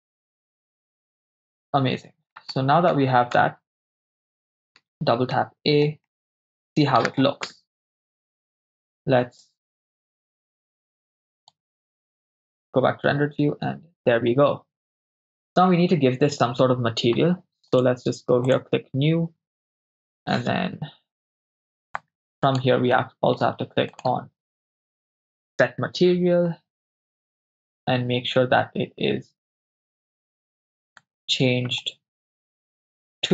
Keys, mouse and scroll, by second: 0.4 right click, 0.4 BackSpace, 1.0-2.3 middle drag, 2.5 shift+middle click, 3.4 Tab, 4.2 Tab, 4.8 a, 4.9 a, 5.4 middle click, 6.1-6.6 shift+middle drag, 7.5 KP_0, 10.6 click, 12.7 click, 17.7 click, 18.5-19.0 drag, 20.4-21.5 middle drag, 22.0 click, 22.9 middle click, 23.6 shift+a, 31.8 middle click, 33.0-33.3 drag.